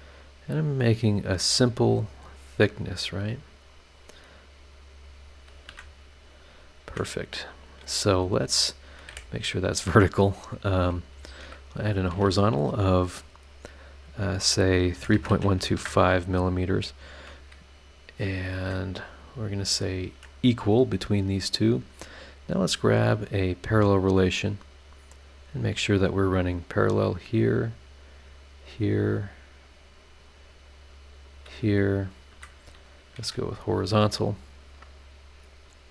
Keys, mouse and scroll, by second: 1.4 click, 2.9 click, 3.9 click, 5.0 click, 5.7 Escape, 6.9 Escape, 7.4-7.9 scroll up 2, 8.8 click, 9.1 v, 11.1 shift+h, 11.7 shift+click, 14.9-15.6 typing, 15.7 KP_Enter, 18.1 scroll up 2, 18.6 Escape, 19.2 click, 19.9 click, 20.1 e, 20.5-21.1 scroll down 2, 21.3-21.6 scroll up 1, 22.7 click, 24.5 click, 25.3 click, 25.7 scroll down 1, 26.3 scroll up 1, 26.9 click, 27.7 click, 28.0 scroll down 1, 28.4 scroll up 2, 29.2 click, 30.3 click, 30.7 click, 31.2 click, 31.7 scroll down 2, 32.0-32.3 scroll up 2, 32.3 Escape, 32.9 click, 33.2 h, 33.7 scroll down 1, 34.3 scroll down 1, 35.5 scroll up 1.